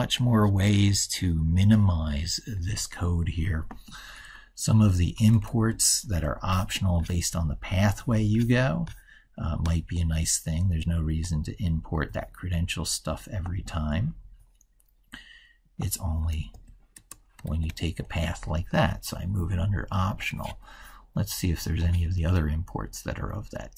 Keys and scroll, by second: 5.4 ctrl+x, 16.4 ctrl+v, 17.5 ctrl+s.